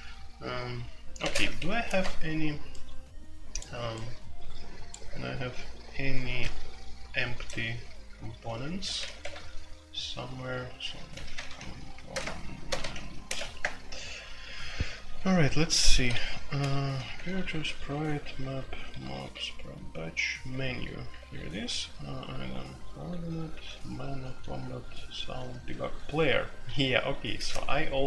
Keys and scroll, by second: 1.2-1.5 typing, 8.3-9.2 typing, 10.8-13.3 typing, 13.6 Return, 15.9 alt+3, 16.2-19.1 typing, 20.5 j, 21.0 j, 22.2-27.1 typing.